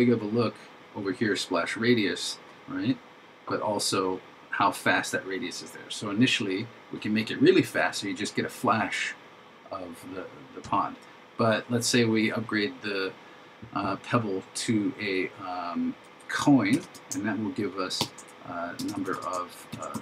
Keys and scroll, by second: 18.0 shift+3, 19.8 shift+s.